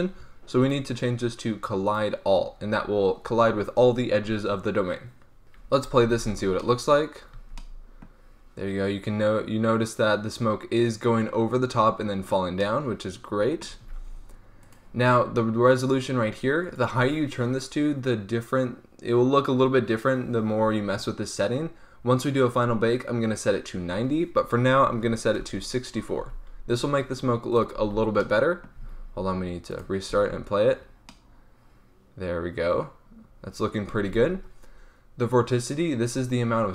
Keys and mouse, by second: 0.5-5.4 drag, 5.4 middle click, 5.9 alt+a, 7.3 z, 12.5 middle click, 12.9 middle click, 13.1-13.5 middle drag, 13.7 alt+a, 17.0-21.9 drag, 26.1 z, 27.4-28.8 drag, 27.7 alt+a, 28.8 alt+a, 30.0 alt+a, 31.1 click, 33.9 alt+a.